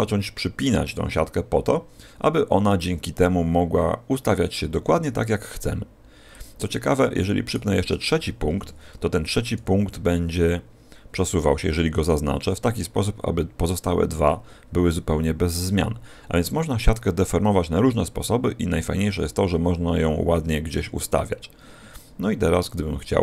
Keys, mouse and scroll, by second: 0.5 right click, 0.9 g, 6.3 click, 7.4 right click, 8.4 p, 10.3 g.